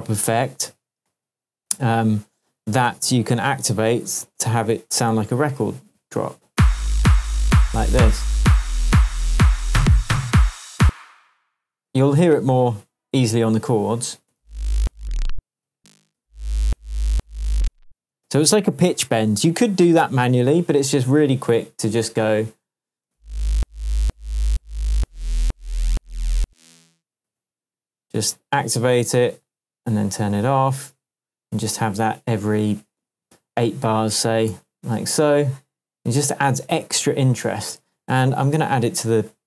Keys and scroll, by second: 6.5 space, 10.8 space, 14.3 space, 15.5 space, 18.0 space, 23.0 space, 26.4 space, 34.5 super+d.